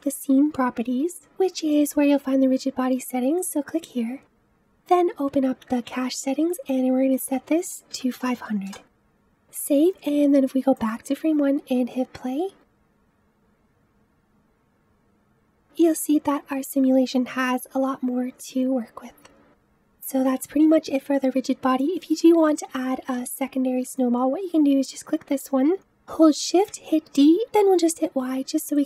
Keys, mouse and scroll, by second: 3.2-4.4 drag, 4.7-5.9 drag, 5.9-7.0 scroll down 8, 7.0-8.1 drag, 8.1 KP_0, 9.0 ctrl+s, 10.7 click, 11.7 space, 22.3-23.9 drag, 26.5 shift+d.